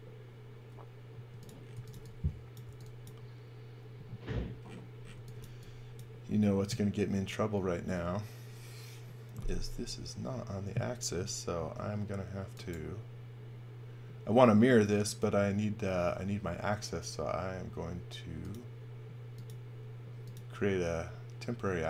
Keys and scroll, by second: 1.1-2.6 typing, 4.8-5.8 typing, 11.5 space.